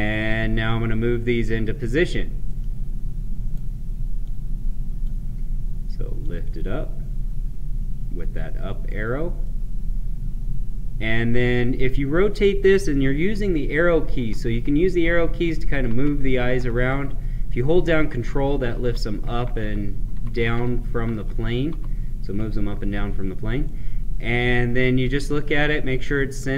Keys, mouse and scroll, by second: 0.1-2.4 drag, 2.3-4.1 right drag, 4.1-9.3 drag, 9.3-13.7 right drag, 13.7 Right, 15.8 Left, 16.2 Right, 17.0 Right, 18.0 ctrl+Down, 18.5 ctrl+Up, 19.1 ctrl+Down, 20.0 ctrl+Up, 21.1 ctrl+Down, 21.6 ctrl+Up, 23.6-26.5 right drag.